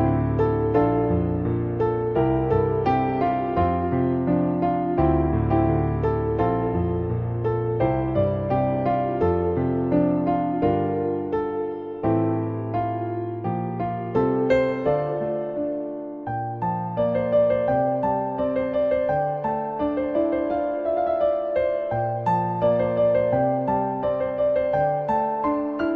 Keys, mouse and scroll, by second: 0.5 middle drag, 5.2 shift+middle click, 7.8 click, 8.4 shift+middle click, 9.0 shift+middle click, 9.3 middle drag, 10.6 middle click, 11.0 middle click, 12.0 ctrl+1, 12.4 ctrl+2, 12.8 middle click, 13.6 shift+middle drag, 13.9-15.0 middle drag, 16.3 click, 16.8 shift+middle click, 17.7 click, 19.0 click, 21.5 click, 22.2 x, 23.1 `, 23.5 shift+middle click, 24.1 shift+a, 25.5 s.